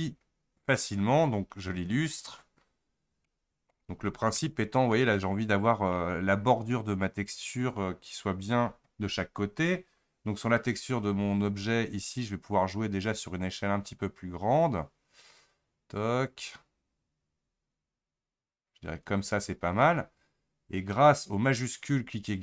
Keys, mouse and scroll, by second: 2.2 click, 3.0-3.3 scroll down 3, 3.3-4.0 middle drag, 4.0-4.4 scroll up 3, 4.4-12.3 middle drag, 12.3-15.1 shift+drag.